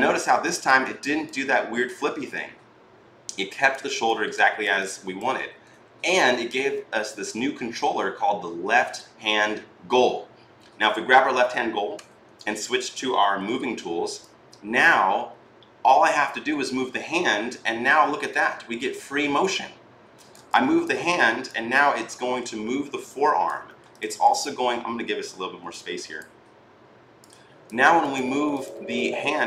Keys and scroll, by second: 11.7 w, 13.0 e.